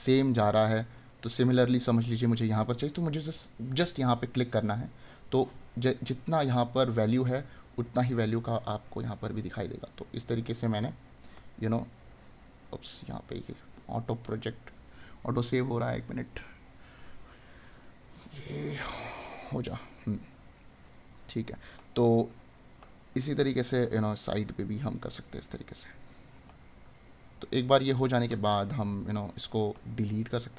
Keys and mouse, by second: 0.2 right click, 9.8 right click, 19.9 right click, 26.2 right click, 28.3 right click.